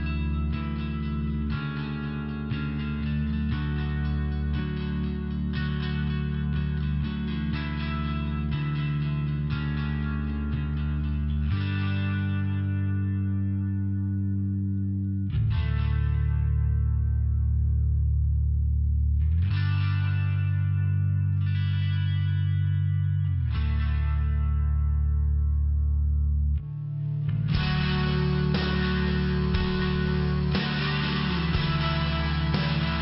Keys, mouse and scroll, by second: 0.7 click, 2.7 click, 3.9 click, 4.2 click, 4.6 click, 5.6 click, 6.5 click, 7.2 click, 7.9 click, 15.7 click, 17.3 click, 18.1 click, 18.3 click, 19.5 click, 19.8 click, 20.8 click, 21.8 click, 23.2 click, 29.4 click, 30.7 click.